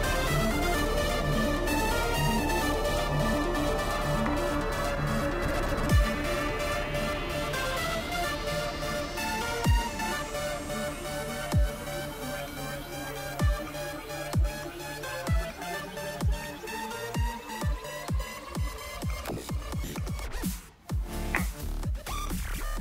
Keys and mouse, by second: 5.7-7.7 drag, 11.9-17.9 drag, 19.6 click, 21.7-22.8 drag.